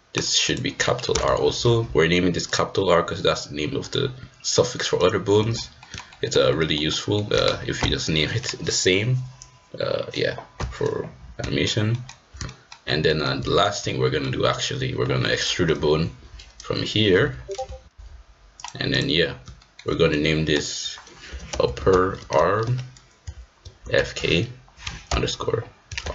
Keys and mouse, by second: 0.1-2.5 drag, 5.3 middle click, 5.8 middle click, 6.1 shift+middle click, 6.5 middle click, 6.9 middle click, 11.5 shift+middle click, 11.9 shift+middle click, 12.4 shift+middle click, 13.0 middle click, 13.4 shift+middle click, 13.8 middle click, 16.0 e, 18.9 click, 19.5 shift+middle click, 19.8-20.5 middle drag, 20.5-26.1 drag, 21.6 p.